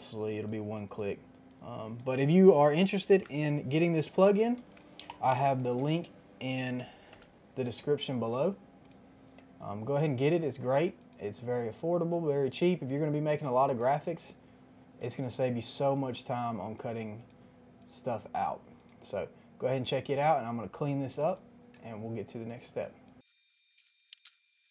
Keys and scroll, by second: 2.9 KP_2, 3.0 KP_5, 3.1 KP_0, 3.8 Return, 4.5 space, 7.1 p, 12.7 ctrl+z, 21.5 space, 23.2-24.7 typing, 23.5 ctrl+z, 23.7 ctrl+z, 23.8 Return, 24.0 ctrl+z, 24.1 Return, 24.3 Return, 24.5 ctrl+z.